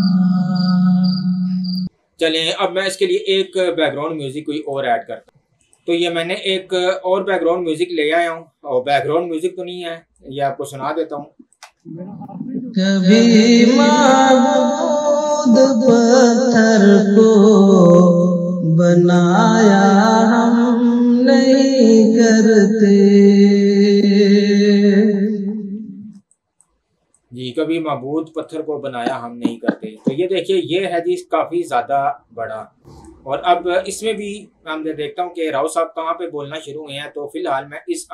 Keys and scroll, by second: 11.6 space, 26.3 space.